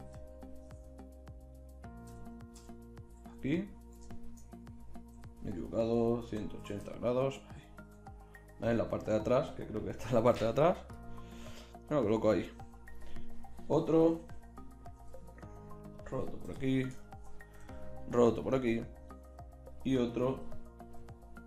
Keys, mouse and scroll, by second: 5.2 r, 10.4 g, 11.4 g, 13.2-15.4 drag, 14.2 KP_1, 15.0 r, 16.4 KP_7, 17.6 r, 20.4 KP_3, 21.0 r.